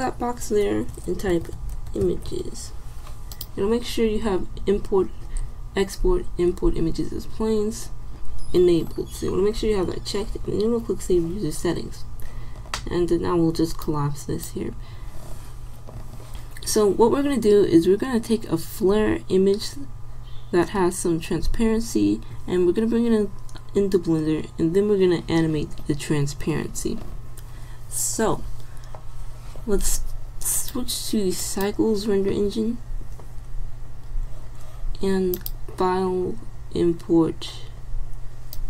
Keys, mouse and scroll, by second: 13.9 click.